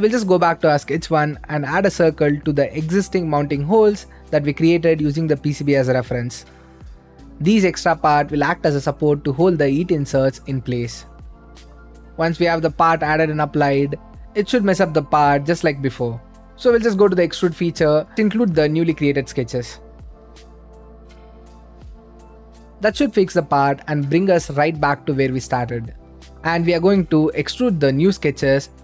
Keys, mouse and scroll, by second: 1.5 click, 2.3 middle click, 2.8 right click, 3.6 middle click, 4.4-5.2 scroll up 2, 6.1 d, 7.0-8.0 drag, 9.6 middle click, 9.7 c, 10.1-11.2 drag, 11.9 middle click, 12.4 scroll up 2, 12.7 middle click, 13.3 click, 14.6-18.1 right drag, 18.3-19.6 drag, 19.8-20.4 scroll down 2, 20.4 scroll down 1, 20.7 click, 21.7 right click, 22.6 middle click, 23.0 middle click, 24.0 click, 24.5 click, 25.4 middle click, 26.0-27.6 right drag, 27.8 middle click, 28.6 click.